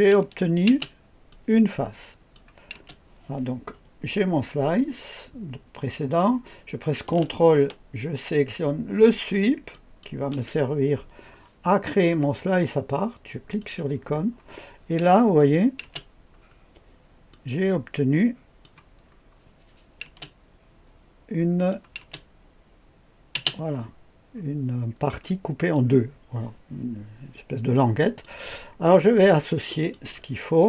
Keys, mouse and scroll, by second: 0.7 space, 1.3-2.4 drag, 2.8 space, 9.7 ctrl+click, 13.6 click, 15.3 click, 15.8 space, 16.3-17.0 scroll down 2, 17.3-18.7 drag, 19.0-20.1 scroll up 2, 20.1 space, 21.5 click, 22.0 click, 22.0 space, 23.3 space, 24.3-24.8 scroll up 1, 24.8-25.2 scroll down 1, 25.2 click, 27.7 click, 29.1 click, 29.7 ctrl+click, 30.2-30.6 ctrl+drag.